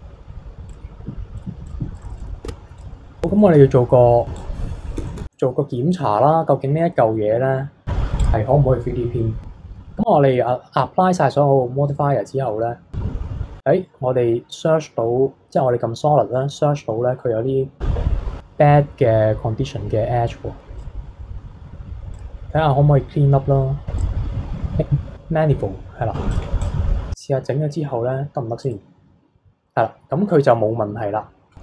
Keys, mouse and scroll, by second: 0.7-2.2 drag, 2.5 Tab, 2.8 click, 3.1 scroll down 1, 3.4 shift+middle click, 4.3 click, 5.1-8.2 shift+middle drag, 8.2 click, 11.8-14.3 drag, 20.8 click, 22.1-25.8 drag, 26.3 click, 26.6 click, 28.6-30.5 drag, 30.5-31.6 middle drag.